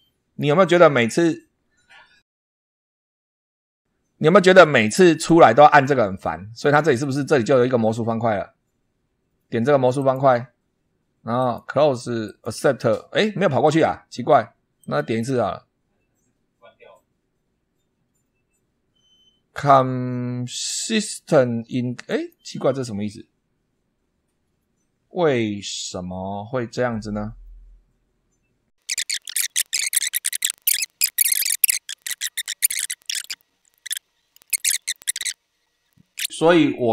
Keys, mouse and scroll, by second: 9.8 click, 11.2 click, 12.1 click, 14.6 click, 21.9 click, 25.7-26.1 scroll down 2, 28.8 click, 29.0 click, 29.2 click, 29.4 Delete, 29.5 click, 29.6 scroll up 2, 29.8 middle click, 30.6 click, 30.8 Delete, 31.9 middle click, 32.0 scroll up 1, 32.2 click, 32.2 middle click, 32.6 click, 33.2 click, 33.3 Delete, 33.6 scroll down 2, 33.6 middle click, 33.8 click, 33.9 click, 34.2 click, 34.2 middle click, 34.3 shift+scroll down 2, 34.7 click, 34.8 shift+middle click, 34.9 shift+scroll up 2, 35.0 ctrl+click, 35.2 click, 35.8 click, 35.8 Delete, 35.9 click, 36.1 scroll up 1, 36.1 shift+middle click, 36.6-36.9 middle drag.